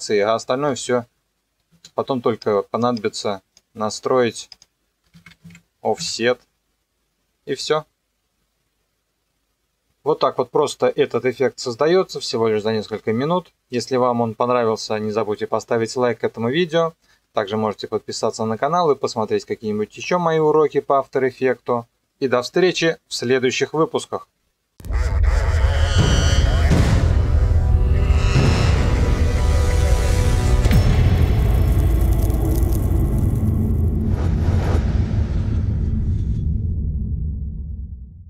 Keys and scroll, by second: 0.7 KP_0, 1.7 space, 5.0 KP_0, 5.3 KP_4, 5.4 KP_Enter, 6.0 KP_0.